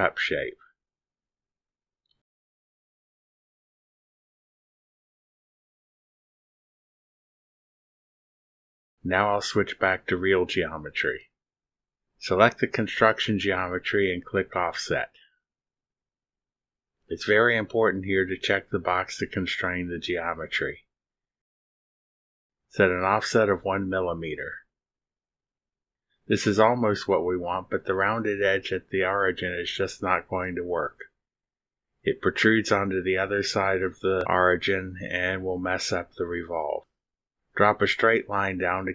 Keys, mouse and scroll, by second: 2.0 click, 3.1 click, 3.7 click, 4.1 click, 4.9-5.7 drag, 6.2-7.2 drag, 7.8-8.7 drag, 10.9 click, 12.3-13.8 drag, 17.5 click, 22.4 click, 25.8 1, 26.3 Return, 28.7-29.6 scroll up 6, 30.3-30.7 drag, 31.1-31.5 scroll up 4, 31.5 click, 32.2-32.6 scroll up 4, 32.7-33.2 drag, 33.3 scroll up 2, 33.8-34.3 drag, 34.5 scroll down 2, 35.0-35.5 drag, 36.8 click, 38.7 click.